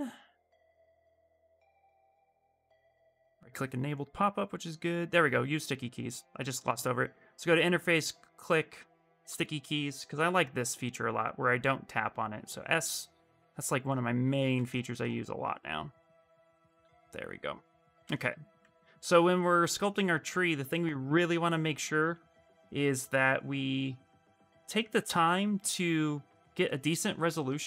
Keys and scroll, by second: 9.8 s, 13.7 s, 16.7 s, 21.8 ctrl+z.